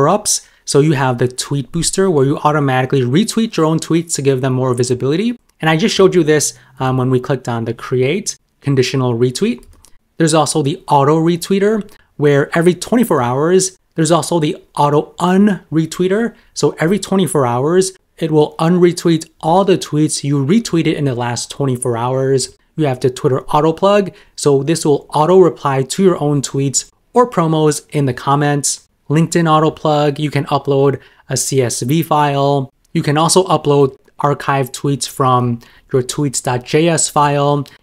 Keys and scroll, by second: 2.5 super+m, 13.3 super+m, 33.9 super+m.